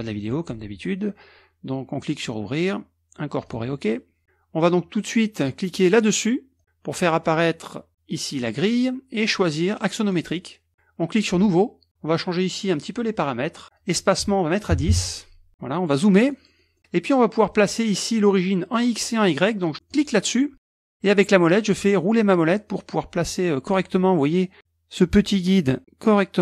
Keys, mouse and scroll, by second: 2.1 click, 3.5 click, 5.9 click, 8.4 click, 9.2-10.5 drag, 11.3 click, 13.8 click, 14.8 KP_1, 14.9 KP_0, 15.5 click, 16.2-18.0 middle drag, 19.9 click, 21.3-23.1 scroll up 1, 23.2-23.9 scroll down 1.